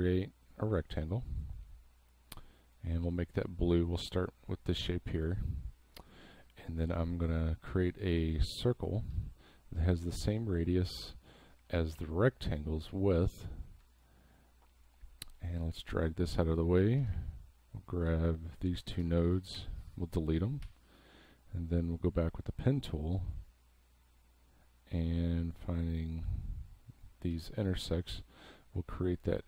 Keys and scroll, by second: 3.0 v, 12.0 v, 12.9 space, 17.0 a, 19.6 Delete, 27.3 v.